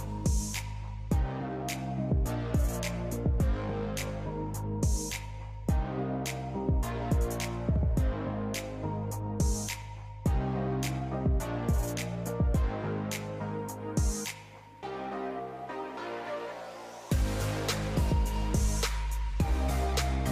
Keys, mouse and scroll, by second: 5.9 click, 11.5-12.2 scroll down 2, 12.2-14.0 drag, 14.0 KP_0, 15.9-18.9 drag, 19.6 click.